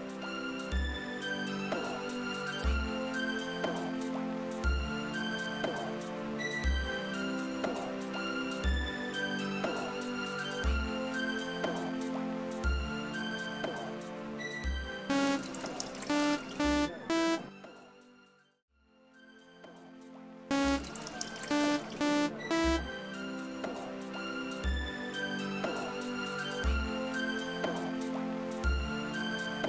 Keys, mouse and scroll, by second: 2.6 click, 4.5 click, 12.9 click, 14.3 click, 15.0 space, 18.0 space, 20.4 space, 22.9 space, 25.5 click, 26.9 click, 28.3 click, 29.3 click.